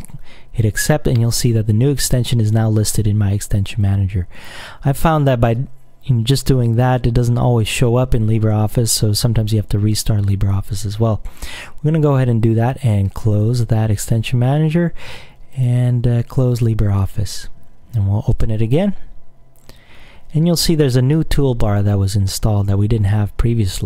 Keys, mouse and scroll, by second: 3.9 click, 13.3 click, 15.6 click, 16.6 click, 18.5 click.